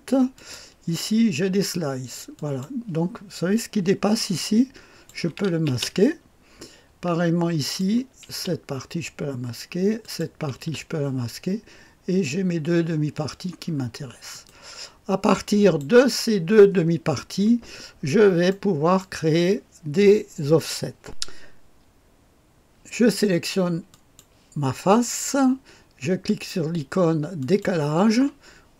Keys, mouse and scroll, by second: 0.3 click, 2.3 click, 4.2 click, 5.3 click, 5.6 space, 7.6 click, 8.2 click, 8.3 space, 9.9 click, 10.5 space, 10.7 space, 13.6-14.4 scroll down 2, 14.4-15.9 drag, 17.8-18.4 scroll up 2, 18.4 middle click, 19.3-21.0 drag, 23.8 click, 27.3 click.